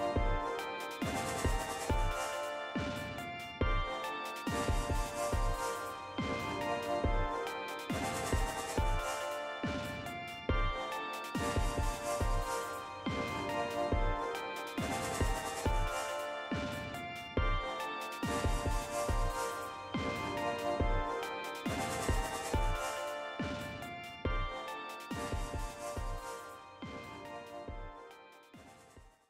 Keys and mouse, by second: 3.5 click, 5.7 click, 29.0 shift+z.